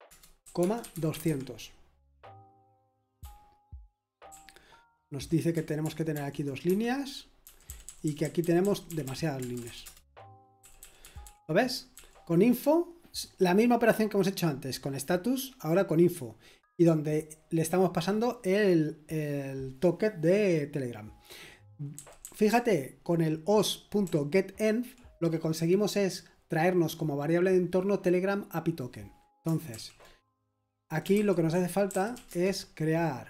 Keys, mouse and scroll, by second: 0.0-1.6 typing, 2.9-6.1 typing, 6.6 Escape, 7.4-11.0 typing, 13.6-14.3 typing, 21.9-23.2 typing, 26.4-27.2 typing, 31.9-32.2 typing.